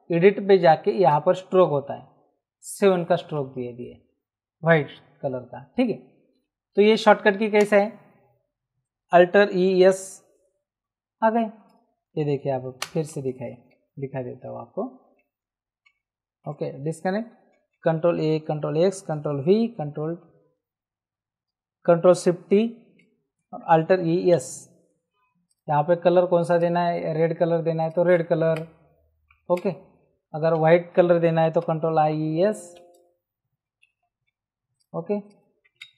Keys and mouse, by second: 1.0 click, 3.3 Return, 7.5 ctrl+z, 9.4 alt+e, 9.7 alt+s, 11.3 Escape, 12.8 ctrl+z, 15.1 ctrl+alt+z, 16.4 ctrl+d, 18.1 ctrl+a, 18.5 ctrl+x, 19.1 ctrl+v, 23.7 alt+e, 23.9 alt+s, 25.5 click, 27.8 click, 28.4 Return, 28.4 KP_Enter, 30.5 ctrl+z, 31.4 alt+e, 31.6 alt+s, 32.1 alt+z, 32.8 Escape, 33.9 alt+e, 34.0 alt+s, 34.7 click.